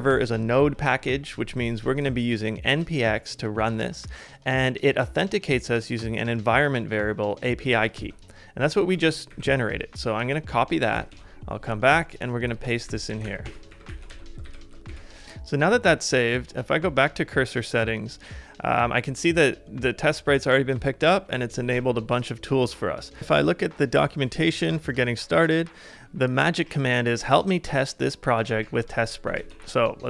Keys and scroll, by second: 8.0 super+Tab, 9.3 alt+super+Right, 11.1 super+Tab, 12.8-14.4 typing, 14.5 ctrl+c, 28.6 super+c, 29.4 super+Tab.